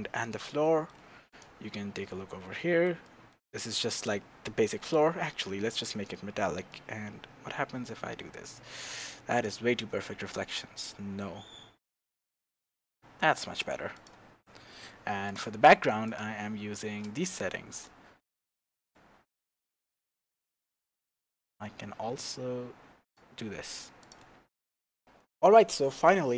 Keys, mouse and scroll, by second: 5.7-14.0 drag, 14.2-15.3 scroll up 1, 15.3 click, 16.0 click, 17.3-19.0 shift+middle drag, 19.0-24.1 drag, 25.0-26.3 drag, 25.0-25.6 scroll down 1.